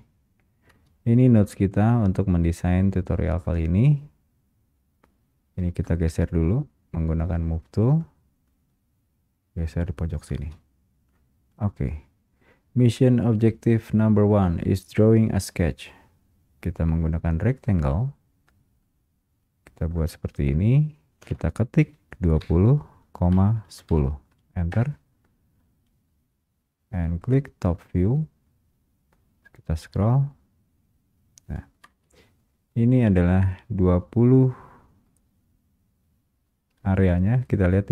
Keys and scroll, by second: 0.8 Return, 0.8 space, 10.6 space, 24.8 space, 24.9 Return, 29.8 Return, 32.0 space.